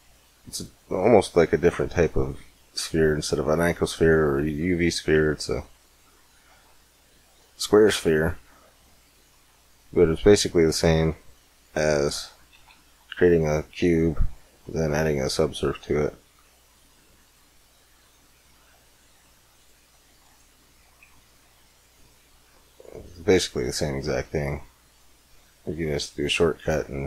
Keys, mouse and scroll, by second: 1.4-4.4 middle drag, 5.6-7.5 middle drag, 7.9 middle click, 9.7 click, 10.5 right click, 10.9 middle click, 11.7 x, 12.4 shift+a, 15.3-17.2 drag, 18.4 middle click, 19.3-22.0 drag, 22.0-25.1 middle drag, 25.1 click, 26.2 x, 26.7 shift+a.